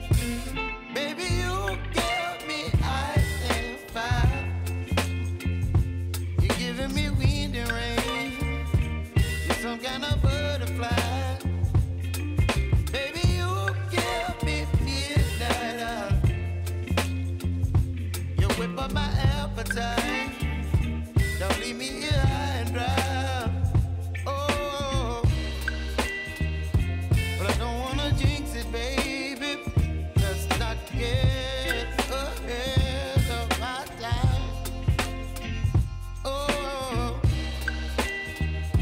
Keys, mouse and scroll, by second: 1.3 click, 5.9 Return, 7.0 click, 9.5 click, 12.1 ctrl+0, 13.6 click, 16.0 s, 16.7-23.7 drag, 23.7 Left, 25.1 Up, 25.9 Left, 26.9 Up, 29.1 click, 30.9 ctrl+a, 31.2-32.6 typing, 33.6-37.3 drag, 38.7 Return.